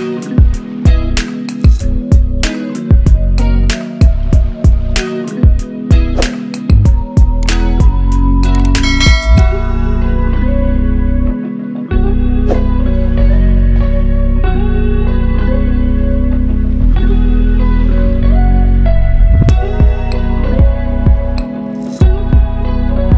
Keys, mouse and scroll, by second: 4.0 click, 4.6 scroll down 1, 4.8 scroll up 1, 5.7 click, 6.4 ctrl+alt+shift+e, 7.3 ctrl+shift+a, 9.8 scroll down 1, 10.8-12.3 drag, 17.3-18.0 click, 22.9 typing.